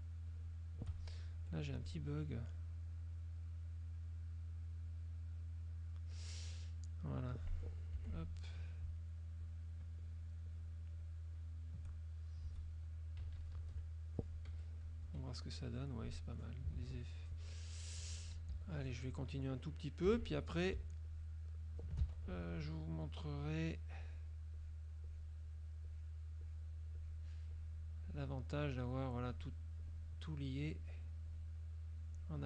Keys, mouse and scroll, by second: 0.4 shift+click, 1.5 F2, 1.7 click, 3.0-4.8 drag, 4.9-6.1 drag, 8.1 F6, 8.3 click, 9.5 shift+click, 10.1 shift+click, 10.6 shift+click, 11.1 shift+click, 13.3 KP_Subtract, 14.5 F1, 14.7 right click, 15.5 F2, 15.5 click, 16.1 click, 17.1 ctrl+s, 17.1 ctrl+click, 18.1 F2, 18.6 z, 18.9 click, 20.1 F6, 21.2 shift+click, 22.7 ctrl+shift+z, 22.7 ctrl+shift+click, 23.3 shift+click, 24.1 shift+click, 24.7 shift+click, 25.2 shift+click, 26.0 shift+click, 26.5 shift+click, 27.1 shift+click, 27.7 shift+click, 28.2 shift+click, 28.8 shift+click, 29.3 shift+click, 29.9 shift+click, 30.8 shift+click, 31.4 shift+click, 32.3 shift+click.